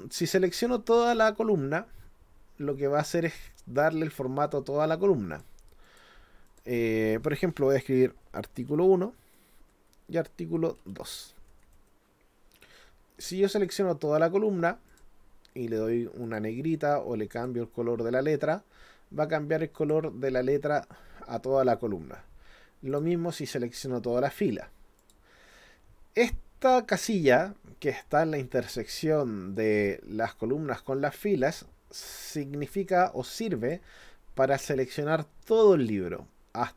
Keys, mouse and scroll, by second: 5.3 click, 5.9 click, 6.5 click, 13.6 click, 14.9 click, 16.2 click, 17.4 click, 19.8 click, 22.9 click, 25.0 click, 33.6 click.